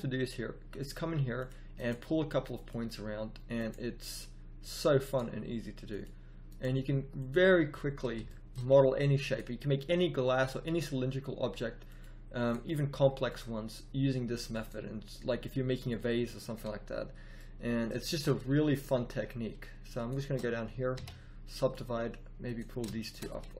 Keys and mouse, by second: 0.9 g, 1.8 g, 3.8 g, 5.1 g, 6.6 g, 9.9 g, 11.0 g, 12.5 g, 14.8 g, 18.0 z, 20.9 w.